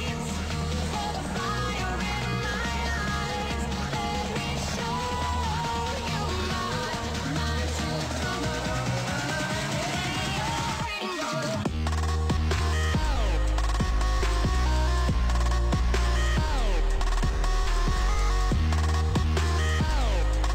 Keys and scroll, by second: 4.0 space, 14.1 ctrl+s.